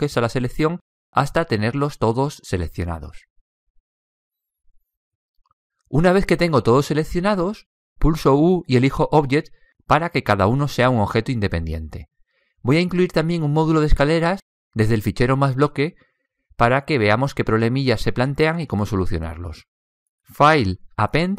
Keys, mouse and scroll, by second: 8.7 u, 15.1-17.3 middle drag, 18.2-20.3 middle drag.